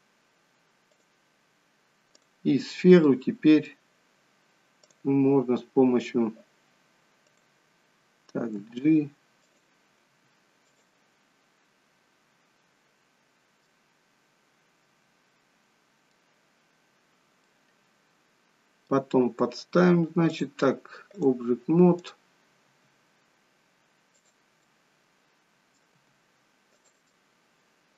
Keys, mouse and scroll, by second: 0.8 click, 2.6 click, 3.0 middle click, 4.9 click, 7.4 click, 8.6 g, 9.3 click, 10.0 g, 10.7 click, 13.6 middle click, 17.5 middle click, 20.2 click, 21.9 click, 22.6 g, 24.7 middle click, 26.0 g, 27.1 middle click.